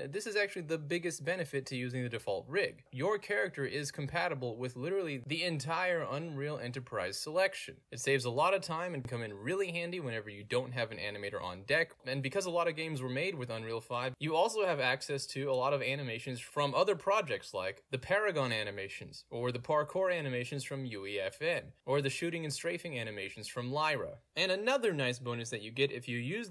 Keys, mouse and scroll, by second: 2.8 click, 18.0 click.